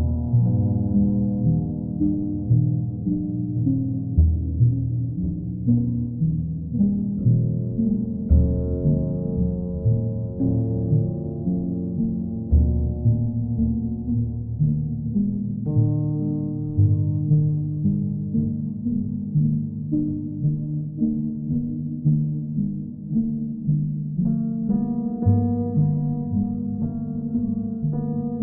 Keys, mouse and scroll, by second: 0.7 ctrl+click, 1.2 alt+middle click, 2.1 ctrl+click, 2.6 ctrl+click, 3.2 w, 5.4 click, 6.2 alt+middle click, 6.6 click, 8.0 q, 8.6 ctrl+click, 10.5 click, 10.7 ctrl+z, 12.7-13.8 right drag, 14.0-15.0 drag, 17.2-18.2 drag, 19.4 click, 22.2 click, 23.3 ctrl+z, 25.9 click, 27.9 alt+click.